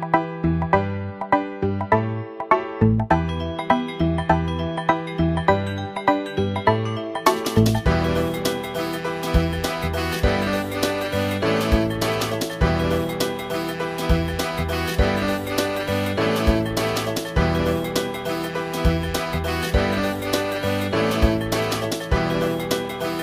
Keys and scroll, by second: 17.9 space.